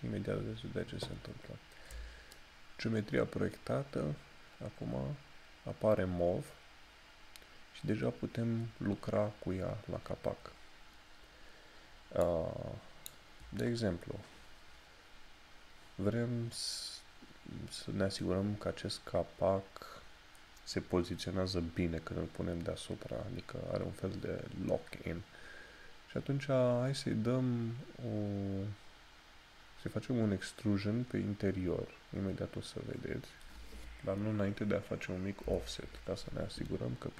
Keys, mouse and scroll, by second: 1.4 scroll down 1, 2.4 shift+middle click, 25.0 scroll up 1, 35.6 o.